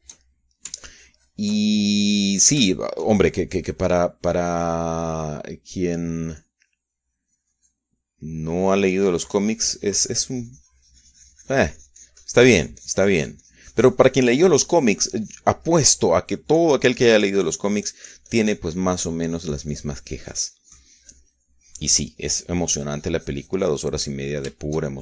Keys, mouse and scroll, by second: 1.8 ctrl+shift+click, 2.6 ctrl+shift+click, 3.8 click, 5.6 click, 7.2 click, 8.2-10.2 drag, 10.3-17.4 drag, 17.5 middle click, 18.4-25.0 drag.